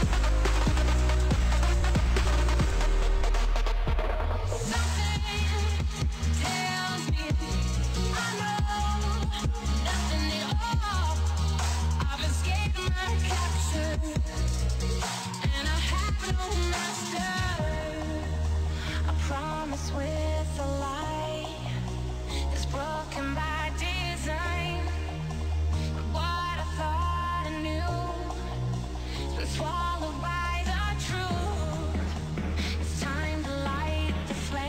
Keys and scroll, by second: 1.0 ctrl+d, 6.8 Delete.